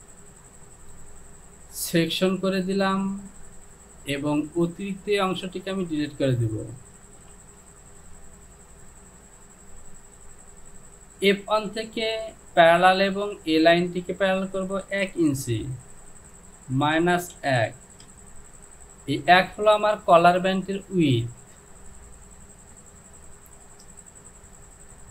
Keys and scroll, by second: 7.5 Delete, 16.8 KP_Subtract, 17.4 KP_1, 18.1 Return.